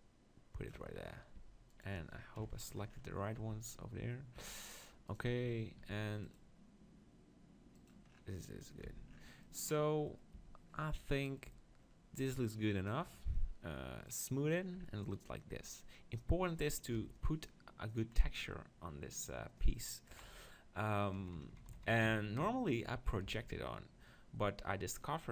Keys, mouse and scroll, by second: 0.8 Tab, 1.4 Tab, 1.7-4.7 middle drag, 3.6 Tab, 4.4 Tab, 5.1 click, 5.8 ctrl+r, 5.8-6.9 right drag, 7.9-9.6 drag, 8.9 Tab, 9.6-11.3 middle drag, 10.3 Tab, 11.5 Tab, 14.1-16.0 drag, 15.0-16.9 middle drag, 16.9 KP_7, 18.2-20.1 middle drag, 20.3 KP_7, 21.2 KP_6, 21.3 KP_6, 23.2 KP_4.